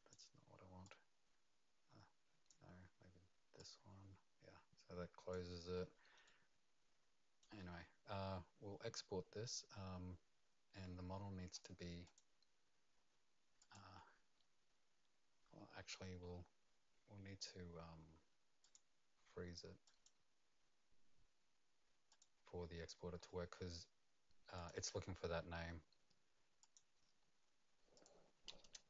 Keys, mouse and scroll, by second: 0.8 click, 5.6 click, 5.6 scroll down 1, 5.7 middle click, 6.2 right click, 11.5 click, 12.0 click, 16.3 click, 18.6 click, 19.8 click, 22.1 click, 22.7-24.5 scroll down 10, 24.5 click, 26.6 click, 26.8 click, 27.9 click, 28.6 KP_Enter.